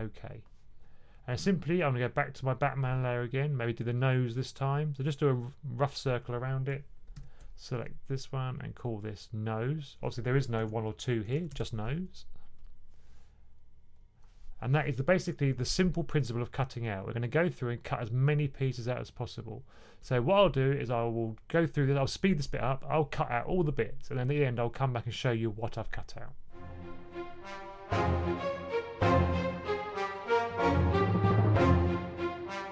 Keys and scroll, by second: 7.0 super+8, 10.5-11.9 typing, 30.1 super+8, 30.3-32.7 typing.